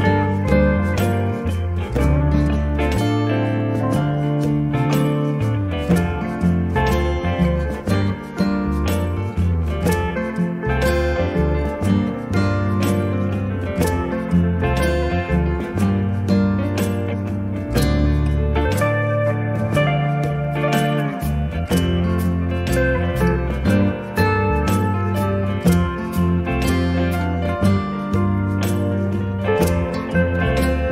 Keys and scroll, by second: 1.0 space, 3.1 m, 15.3 Up, 17.9 Up, 21.9 space.